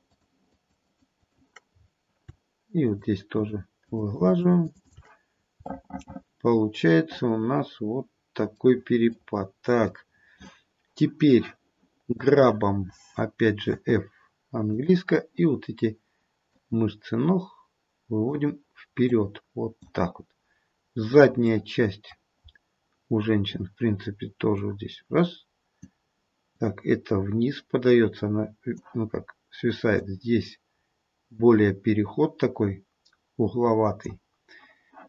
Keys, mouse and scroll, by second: 0.1 shift+click, 0.5 shift+click, 0.8 shift+click, 1.1 shift+click, 1.6-2.2 scroll down 1, 2.2-2.8 scroll down 2, 2.8 shift+click, 3.4 shift+click, 3.8 shift+click, 4.1 shift+click, 4.3 shift+click, 5.1 shift+click, 5.4 scroll down 2, 5.6 middle click, 9.3 middle click, 9.8 middle click, 12.3 click, 13.6 f, 16.5 click, 19.0 click, 21.5 middle click, 22.4-24.6 scroll up 1, 24.6 click, 24.6-25.5 scroll up 1, 26.5 click, 29.9 click.